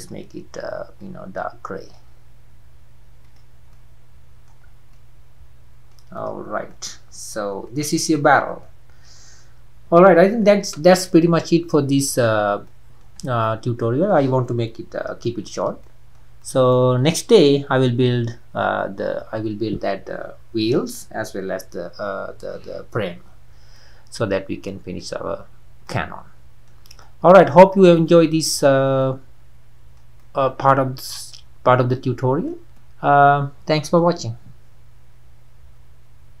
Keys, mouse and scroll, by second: 3.2 click, 3.7-4.7 middle drag, 4.7 scroll down 4, 4.9-6.2 middle drag, 6.2 click, 6.7-7.6 middle drag, 7.6 scroll down 1, 7.7-8.2 middle drag, 8.2-8.6 scroll up 4, 8.6-10.6 middle drag, 10.6 ctrl+s, 12.6-13.2 middle drag, 13.2 scroll down 3, 13.5-17.5 middle drag, 17.5-17.8 scroll down 2, 17.8-25.2 middle drag, 25.2-25.8 scroll up 4, 25.8-26.6 middle drag, 26.6-27.0 scroll up 1, 27.0-27.6 middle drag, 27.6-28.0 scroll down 2, 28.0-28.7 middle drag, 28.7-29.0 scroll down 3, 29.0-32.5 middle drag, 32.5 scroll up 1, 32.7-36.4 middle drag.